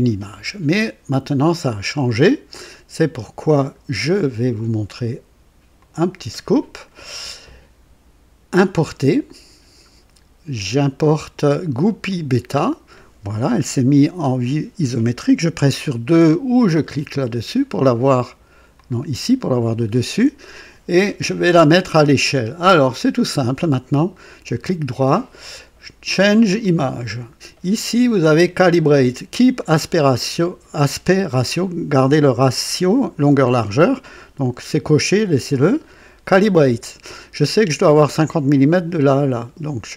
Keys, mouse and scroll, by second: 1.9 click, 3.6 click, 5.7 click, 9.2 click, 11.8 click, 17.1 click, 18.7 click, 24.0 right click, 26.5 click, 35.7 click.